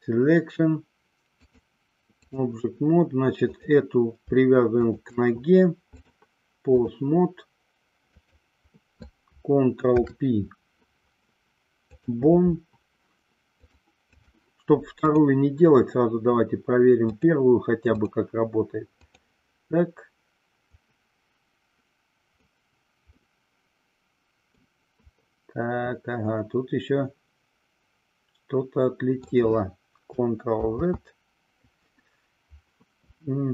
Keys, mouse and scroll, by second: 1.6-2.6 drag, 4.9 shift+click, 6.1-7.2 drag, 10.1 ctrl+p, 13.7-14.7 drag, 15.2 click, 17.2-18.4 drag, 19.2-20.6 drag, 21.0-22.8 drag, 23.3-24.9 middle drag, 25.4-29.6 middle drag, 31.2 ctrl+z.